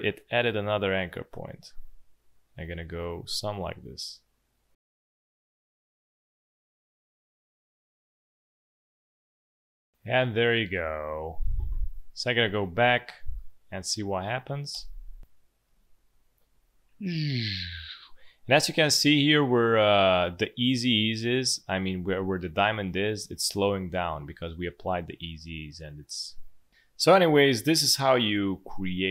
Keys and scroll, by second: 6.7 space, 7.7 space, 9.4 space, 14.6 space, 15.6 space, 23.4 space.